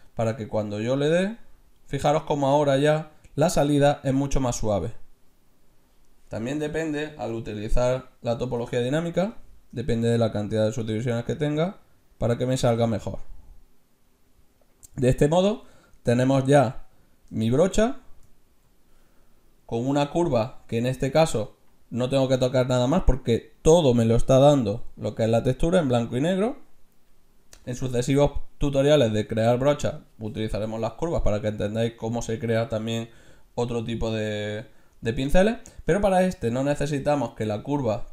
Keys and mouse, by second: 0.3-2.0 drag, 4.5-6.2 middle drag, 6.6-8.4 drag, 10.2-11.8 drag, 11.8 right click, 14.1-15.8 middle drag, 16.4-19.0 middle drag.